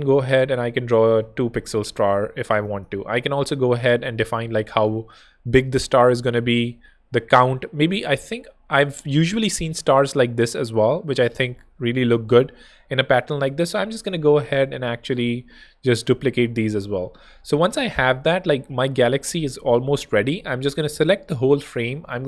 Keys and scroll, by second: 2.7 alt+shift+super+z, 3.5 super+z, 6.0 super+z, 9.1 Escape, 11.7 alt+shift+super+d, 13.6 super+d, 17.7 space, 20.3 super+p, 21.4-22.2 typing.